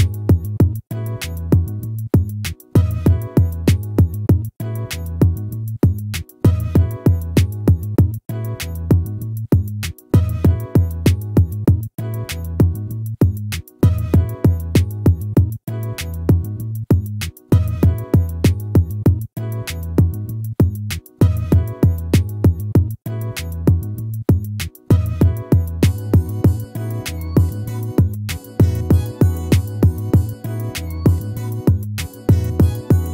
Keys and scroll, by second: 9.9 ctrl+-, 17.9 ctrl++.